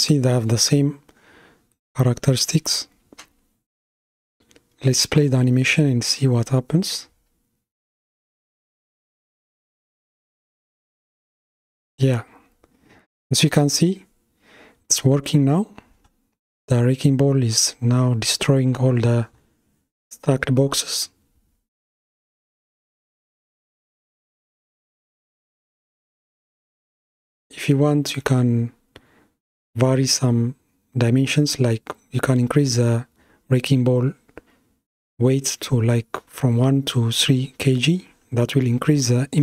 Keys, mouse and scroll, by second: 4.2-7.2 middle drag, 7.2 click, 8.3 space, 13.7-14.7 middle drag, 14.7-15.2 scroll up 2, 15.3-15.8 scroll up 2, 16.0-19.0 middle drag, 25.7-27.0 scroll down 2, 27.0-30.0 middle drag, 30.2 click, 33.7-36.7 drag.